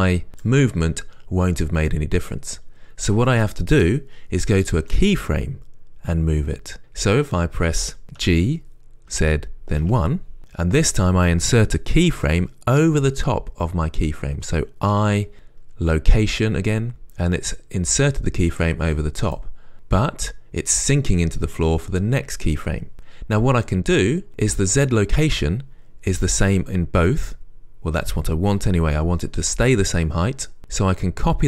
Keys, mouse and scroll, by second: 8.5 g, 10.4 g, 12.6 Return, 15.2-17.5 right drag, 17.1 i, 17.9-19.6 right drag, 20.8-31.4 right drag.